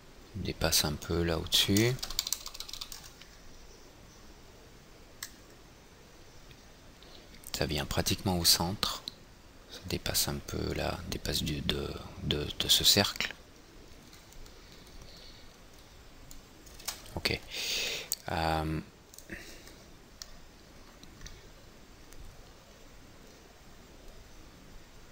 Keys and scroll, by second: 17.3 alt+Tab.